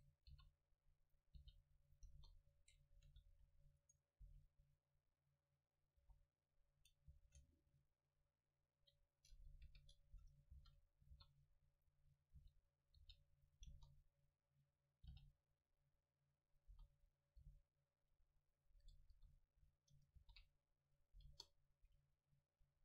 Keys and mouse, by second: 0.1 click, 0.3 r, 1.4 g, 2.2 KP_0, 3.0 a, 3.2 s, 3.9 right click, 4.3 s, 6.1 h, 7.2 ctrl+z, 9.8 KP_7, 10.6 shift+d, 11.2 r, 11.9-15.3 drag, 12.4 r, 13.0 g, 13.7 KP_0, 15.1 g, 16.7-18.5 drag, 16.8 s, 17.4 g, 18.8-20.5 drag, 19.2 KP_7, 20.2 shift+d, 21.2-22.8 drag, 21.3 KP_0.